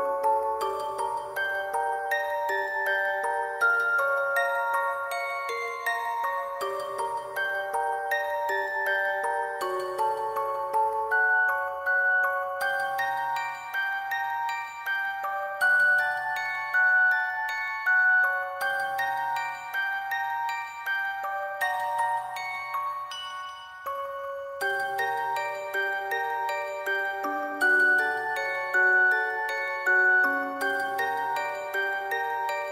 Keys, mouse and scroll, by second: 0.4 alt+click, 0.6 [, 1.2 scroll up 1, 1.5 scroll down 1, 1.6 middle click, 1.9 scroll up 1, 2.2 alt+middle click, 2.4 alt+click, 2.5 alt+click, 2.7 alt+click, 3.0 alt+click, 3.1 alt+click, 4.2 double click, 5.2 double click, 6.3 ctrl+click, 6.6 alt+click, 7.0 alt+click, 7.3 shift+click, 7.6 alt+double click, 7.6 alt+click, 8.2 double click, 9.6 alt+click, 9.8 alt+click, 10.7 double click, 12.8 alt+click, 15.8 alt+click, 16.2 ctrl+click, 16.5 double click, 17.7 ctrl+click, 17.9 shift+click, 18.1 alt+click, 18.3 ctrl+click, 18.7 alt+click, 18.8 alt+click, 19.8 alt+click, 20.8 ctrl+click, 21.1 [, 21.3 [, 21.6 double click, 25.1 double click, 25.4 alt+click, 28.0 alt+click, 30.9 alt+click, 31.0 alt+click, 32.3 alt+click.